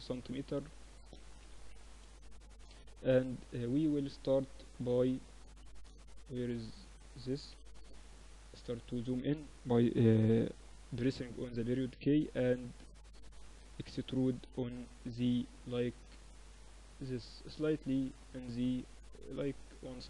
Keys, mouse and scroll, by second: 0.6 s, 2.5 middle click, 4.0 KP_1, 6.6 KP_Decimal, 7.6-9.8 middle drag, 11.0 Tab, 12.2-14.2 drag, 12.5 a, 12.8 a, 13.5 e.